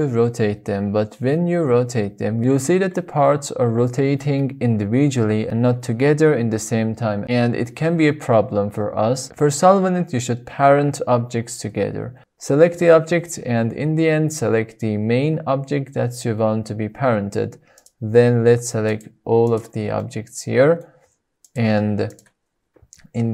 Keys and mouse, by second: 3.1 click, 7.3 shift+click, 8.6 shift+drag, 9.3 shift+middle click, 11.7-12.0 shift+drag, 13.0-13.3 shift+drag, 13.5-13.9 shift+drag, 15.4 shift+click, 17.9 shift+click, 19.6-19.9 shift+drag, 20.1-21.0 middle drag.